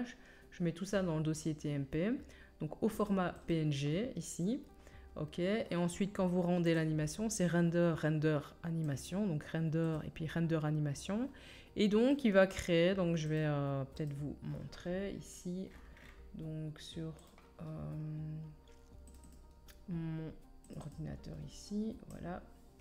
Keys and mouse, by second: 3.5-6.6 drag, 6.6-9.1 middle drag, 9.1 click, 9.9-22.8 middle drag.